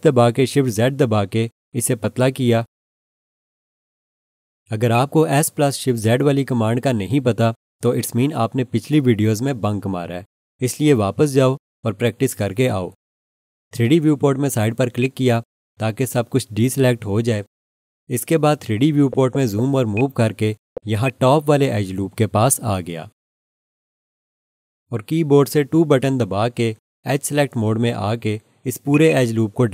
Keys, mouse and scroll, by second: 1.4 s, 1.8 shift+z, 4.9 click, 15.0 click, 18.9 scroll up 1, 19.9 scroll, 19.9 alt+shift+click, 20.6 scroll up 1, 21.0 alt+shift+click, 26.3 2, 28.9 click, 29.1 double click.